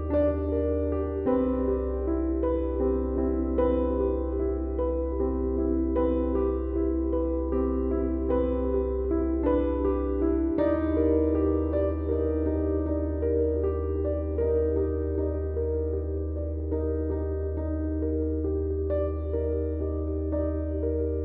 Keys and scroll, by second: 2.2 Tab, 8.6 shift+d, 16.5 Tab.